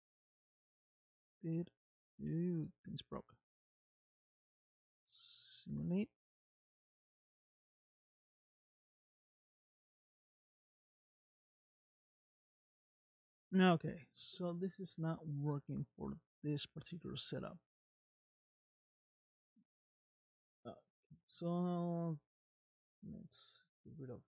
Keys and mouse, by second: 1.0 click, 2.7 middle click, 3.9 space, 6.1 space, 6.6-7.9 middle drag, 8.9-11.9 middle drag, 12.9-14.8 middle drag, 15.6-18.0 middle drag, 19.6 middle click, 24.0 click.